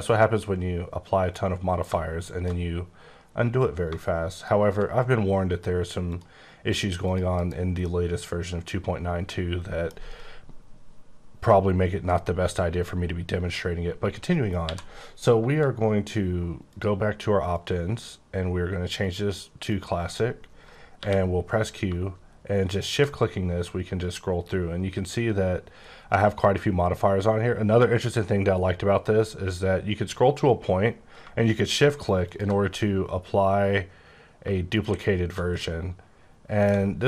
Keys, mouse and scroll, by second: 1.3 click, 3.7 click, 6.0 click, 7.0 click, 7.3 KP_Decimal, 7.8 middle click, 14.6 q, 16.6 click, 17.5 click, 18.9 click, 19.6 click, 20.9 q, 22.7 shift+click, 23.4-24.2 scroll up 9, 24.5 scroll down 6, 24.9-25.8 scroll up 9, 25.9 scroll up 4, 26.3-26.7 scroll down 9, 27.1 scroll, 27.5-27.9 scroll down 4, 28.2 scroll up 4, 29.1 scroll up 1, 29.3-30.0 scroll down 4, 30.0 scroll up 3, 32.2 shift+click, 34.7 click, 35.6 middle click, 36.5 middle click, 36.9 g.